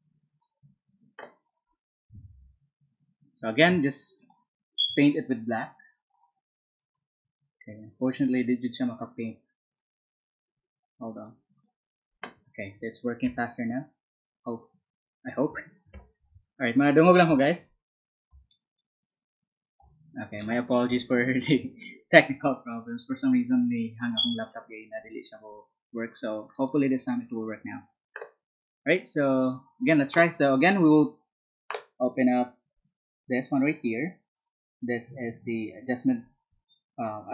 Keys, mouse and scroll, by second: 3.1 b, 11.6 z, 14.5 ctrl+click, 18.3 space, 19.0-20.2 drag, 34.3 click.